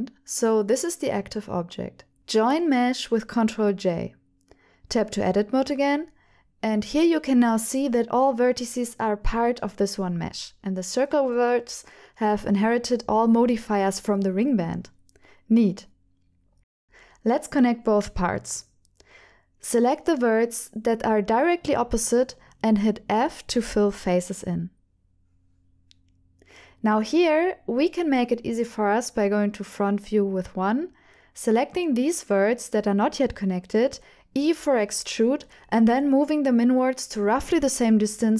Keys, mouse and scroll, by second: 2.3 ctrl+j, 5.5 middle click, 5.9 Tab, 6.2-8.5 middle drag, 8.7 Tab, 9.3 middle click, 10.6 click, 11.9 click, 12.4-14.0 middle drag, 14.1 Tab, 14.5 middle click, 14.8 scroll up 1, 15.6 middle click, 16.3 KP_1, 17.3 ctrl+alt+shift+f, 19.7 shift+click, 20.6 shift+click, 21.5 middle click, 22.4 f, 23.5 click, 24.1 shift+click, 25.4 shift+click, 26.0 f, 26.3-27.8 middle drag, 27.8-28.9 drag, 29.1 click, 29.6 shift+click, 31.6 alt+a, 31.6 ctrl+alt+shift+f, 32.7 alt+click, 34.7 KP_1, 35.2 shift+click, 35.9 shift+middle click, 36.3 e.